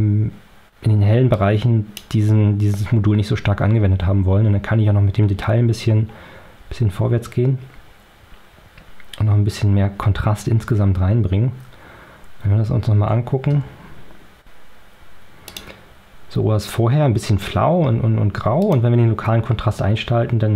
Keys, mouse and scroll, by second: 1.2 click, 4.4-5.0 scroll up 2, 5.2 scroll up 2, 7.0-7.3 scroll up 2, 8.2-8.5 scroll up 2, 9.0-9.5 scroll up 2, 13.4 o, 15.4 click, 18.6 click.